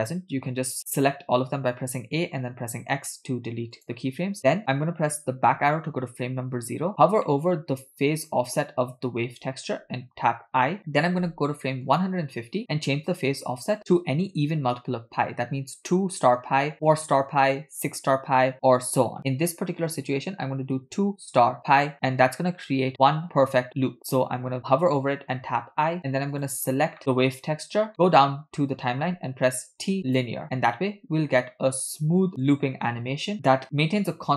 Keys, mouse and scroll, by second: 1.9 a, 2.6 x, 4.4 middle click, 4.6-5.4 scroll up 3, 5.5 Left, 7.3 middle click, 7.8-10.4 scroll up 2, 10.5 i, 12.0 click, 13.3-22.0 drag, 26.4 click, 26.9 scroll down 3, 27.0 middle click, 27.9 middle click, 29.6 t, 30.9 space.